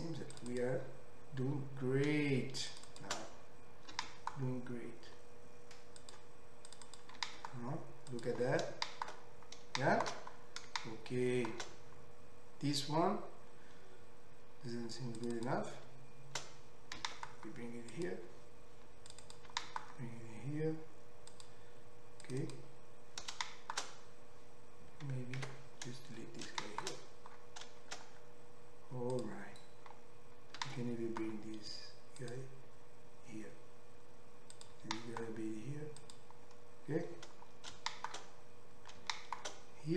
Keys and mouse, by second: 0.3 click, 0.4 middle click, 0.5 click, 0.6-2.7 middle drag, 2.7 shift+click, 2.8 shift+middle click, 2.9 shift+click, 3.0-15.2 shift+middle drag, 4.0 g, 6.8 click, 7.2 g, 15.2 click, 15.3 middle click, 15.4 click, 15.5 middle click, 17.0 g, 19.3 click, 19.5 g, 22.2 click, 22.4 click, 23.3-34.5 shift+middle drag, 25.5 ctrl+x, 30.6 g, 34.5 click, 34.7-39.9 middle drag, 34.9 g.